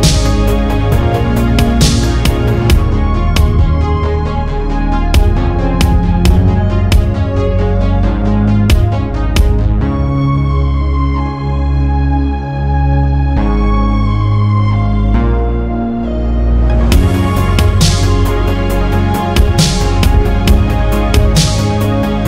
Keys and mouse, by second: 5.4 click, 9.3 shift+a, 16.6 Delete, 17.5 shift+a.